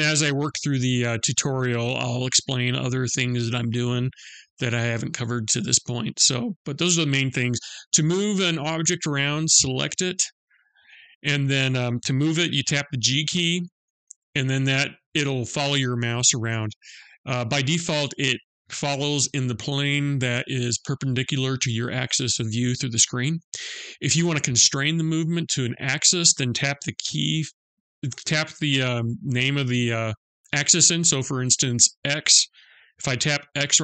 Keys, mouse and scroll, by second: 10.1 click, 13.6 g.